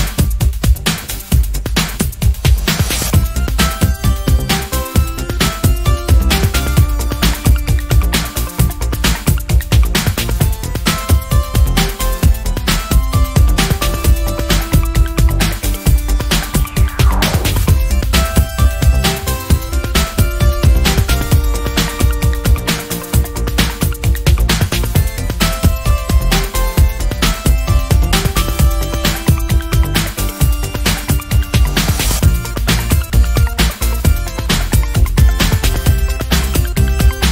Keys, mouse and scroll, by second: 1.2-2.6 ctrl+shift+drag, 3.0-6.0 ctrl+shift+drag, 6.4-6.8 ctrl+scroll up 2, 7.5 ctrl+click, 8.8-9.2 ctrl+scroll down 2, 9.9 click, 10.9 d, 12.0-13.8 ctrl+drag, 14.3 ctrl+shift+click, 15.1 ctrl+shift+KP_Subtract, 16.7 click, 18.0 shift+click, 18.9 shift+click, 19.9 ctrl+shift+d, 20.9 click, 21.7 click, 23.0 d, 24.0 ctrl+shift+click, 24.9 ctrl+z, 26.1 ctrl+shift+click, 27.8-30.1 shift+drag, 30.9 click, 31.6 click, 32.1 click, 34.2 ctrl+scroll up 2, 35.1 ctrl+click, 36.0 ctrl+Left, 36.7 ctrl+Down.